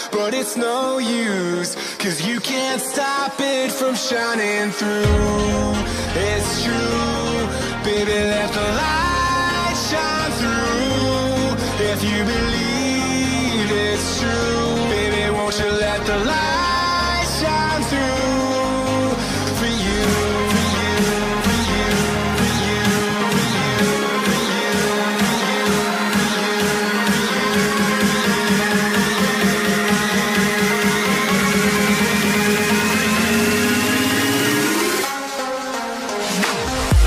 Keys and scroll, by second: 20.1 super+z, 22.0 super+z.